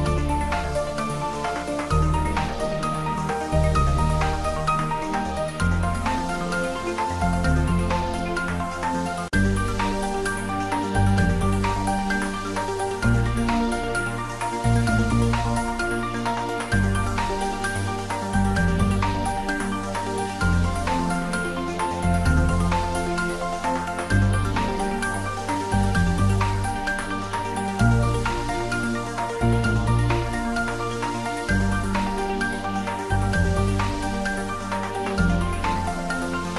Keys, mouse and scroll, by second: 0.7 Tab, 1.3 Tab, 1.8 ctrl+r, 4.5 click, 5.5 ctrl+r, 7.7 Tab, 8.0-8.3 scroll down 1, 8.3 click, 8.5 scroll up 1, 8.8 middle click, 9.9 scroll down 1, 10.5 click, 12.2 scroll up 1, 12.2 g, 12.5 x, 13.0 y, 14.0 click, 14.3 g, 14.8 click, 15.6 g, 15.7 y, 17.3 click, 17.7 scroll down 1, 17.9 middle click, 18.5 scroll up 1, 18.8 middle click, 19.1-19.4 scroll up 1, 19.4 click, 20.2 g, 20.4 z, 21.0 click, 21.2 ctrl+z, 21.5 click, 21.9 shift+click, 22.3 g, 22.5 z, 23.6 click, 24.2 scroll down 1, 24.4 middle click, 25.2-25.8 scroll down 1, 25.8 click, 26.1 scroll up 1, 26.3 middle click, 27.0-27.6 scroll down 1, 27.8 click, 29.1 shift+d, 29.3 y, 29.8 x, 31.9 click, 33.3 r, 33.7 1, 33.9 8, 34.1 0, 34.4 click.